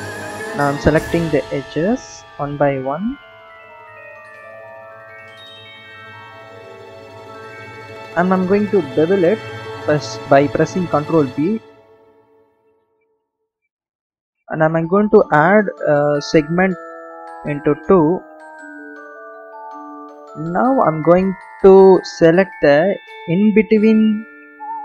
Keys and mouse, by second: 0.3 click, 1.8 alt+shift+click, 3.8 alt+shift+drag, 4.0 alt+shift+click, 4.4 alt+shift+click, 4.6 alt+shift+click, 4.8 alt+shift+click, 5.2 ctrl+z, 5.5 alt+shift+click, 5.9 alt+shift+click, 6.5 alt+shift+click, 9.2 ctrl+b, 17.3 click, 22.5 alt+shift+click, 24.6 alt+shift+click.